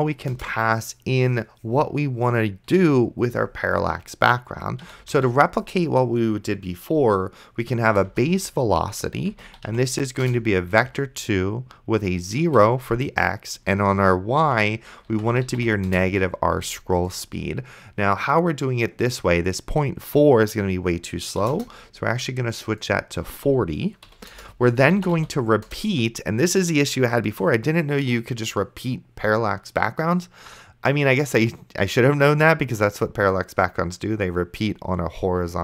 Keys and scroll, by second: 0.4 Return, 4.7-5.9 typing, 8.1 Return, 9.3-10.9 typing, 10.2 Return, 12.5 Tab, 14.5-16.1 typing, 21.5 KP_0, 24.1 ,, 24.3 Return, 25.0 r, 25.3 p, 25.7 Return.